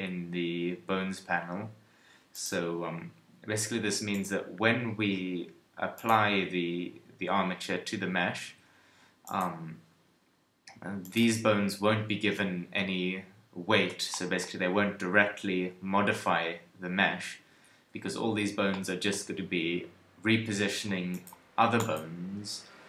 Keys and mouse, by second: 4.1-13.5 drag.